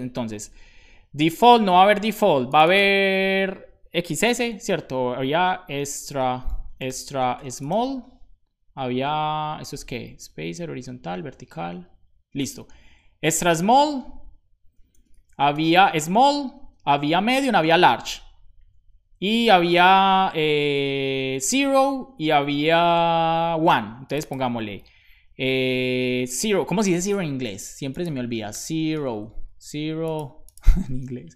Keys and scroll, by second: 0.1 super+Left, 5.6-8.2 typing, 10.1 super+s, 13.2 super+Right, 15.6 super+v, 16.5 Return, 16.8 super+v, 17.3 Return, 17.4 super+v, 17.9 Return, 18.5 super+s, 19.0 Up, 19.2 Up, 19.3 Up, 19.5 Up, 19.7 shift+super+Right, 20.2 Up, 20.6 Return, 21.0 super+v, 21.9 Return, 22.2 super+v.